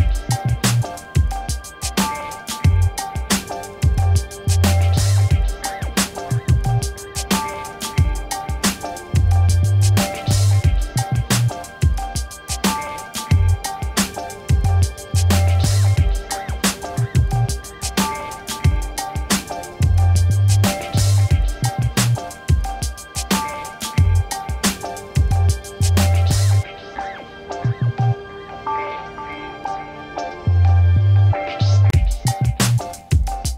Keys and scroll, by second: 2.0 ctrl+-, 15.7-17.2 typing, 21.8 Return.